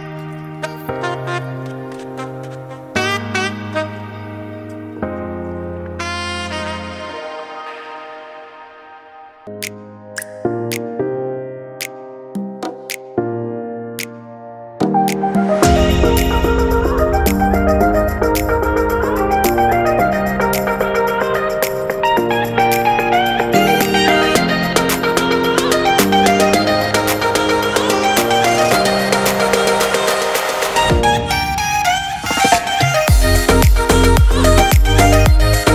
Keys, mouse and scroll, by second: 0.7 ctrl+a, 3.6 shift+middle click, 4.2 Tab, 4.5 middle click, 5.5 click, 5.9 click, 7.7 middle click, 8.8 a, 9.2 middle click, 10.2 u, 12.6 middle click, 14.1 scroll up 2, 14.4 shift+middle click, 15.9 scroll up 2, 16.1 shift+middle click, 19.3-19.9 scroll down 1, 19.9-20.7 scroll down 1, 20.7-21.3 scroll down 3, 21.3 middle click, 22.9 middle click, 23.7 Tab, 24.2 middle click, 25.9-26.2 scroll down 5, 26.3 shift+middle click, 26.9 shift+middle click, 29.1 shift+s, 31.8 click, 35.2 shift+middle click.